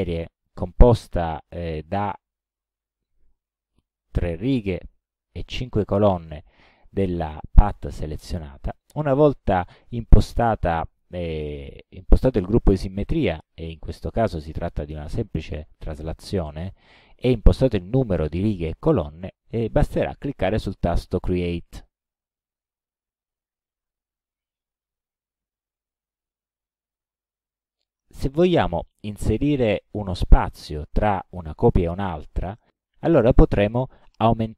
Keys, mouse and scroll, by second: 0.5 click, 3.8 KP_3, 4.8 Tab, 5.7 KP_5, 11.8 click, 15.5 click, 21.8 click, 27.6 click.